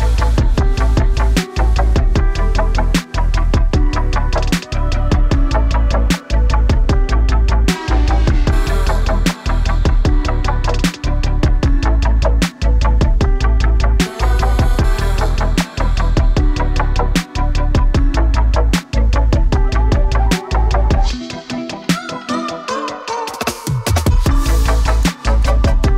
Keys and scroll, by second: 2.6-4.0 typing, 18.5 super+z, 23.9-25.8 typing.